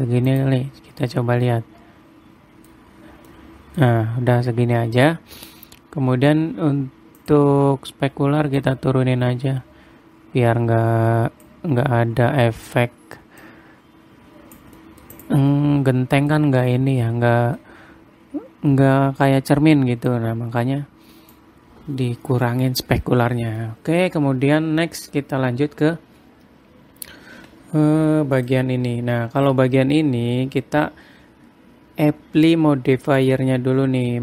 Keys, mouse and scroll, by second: 1.7 middle click, 3.5-3.8 scroll down 3, 3.8 middle click, 4.4 scroll up 2, 6.5-6.9 scroll up 3, 7.7 click, 13.9 click, 15.5 middle click, 15.7 click, 16.1 middle click, 16.9 scroll up 4, 17.2-17.6 scroll down 3, 17.6 middle click, 18.2 scroll up 1, 20.6 click, 24.1 middle click, 27.9 Tab, 28.9 click, 33.7 click.